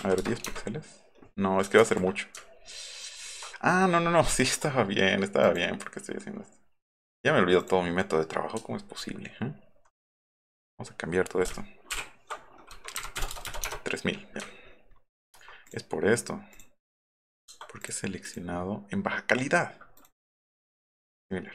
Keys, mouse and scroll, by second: 0.2 KP_0, 0.5 KP_Enter, 2.4 alt+middle click, 2.6 alt+middle click, 3.2 alt+middle click, 4.6 click, 5.5 click, 7.6 click, 9.0-10.1 alt+scroll down 9, 10.5 scroll down 2, 13.0 KP_3, 13.3 KP_0, 13.7 Return, 14.4 scroll up 1, 16.5 click, 17.8 click, 18.2 click, 20.0 right click, 21.1 right click.